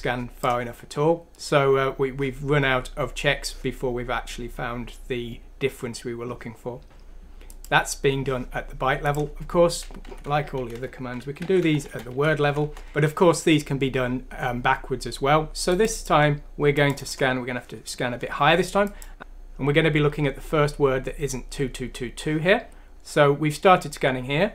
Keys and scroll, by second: 10.1 Down, 10.8 Home, 11.4-13.5 typing.